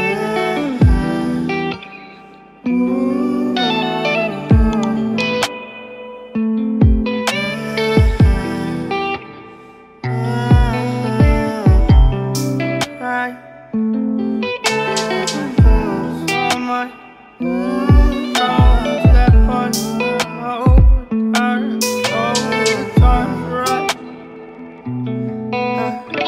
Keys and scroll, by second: 14.7 ctrl+alt+s, 23.4 ctrl+alt+s.